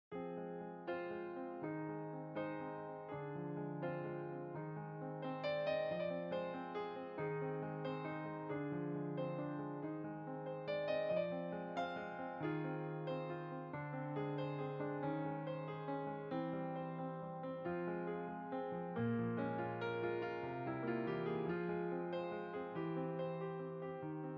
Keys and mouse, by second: 0.3 click, 1.2 f, 1.5 click, 3.0 click, 10.8 click, 11.7 click, 16.5 middle click, 17.1-18.0 typing, 17.2 click, 17.3 click, 17.4 middle click, 18.2 click, 19.8 middle click, 20.5 click, 23.1 middle click, 23.7 f, 23.9 click.